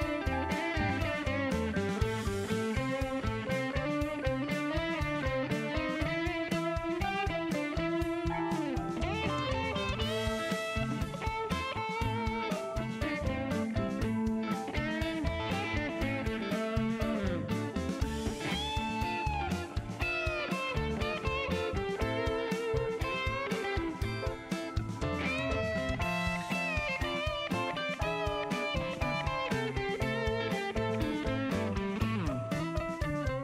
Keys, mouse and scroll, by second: 1.5 click, 2.1 right click, 3.6 click, 4.9 click, 6.3 click, 7.6 KP_5, 9.0 BackSpace, 9.4 KP_8, 10.2 KP_Enter, 11.7 click, 13.2 click, 14.7 KP_1, 14.9 KP_0, 15.0 KP_Enter, 16.8-18.9 drag, 20.8 click, 24.1 click, 26.2 KP_1, 26.4 KP_0, 27.5 click, 28.7 shift+right click, 31.9 shift+right click, 33.0 shift+right click.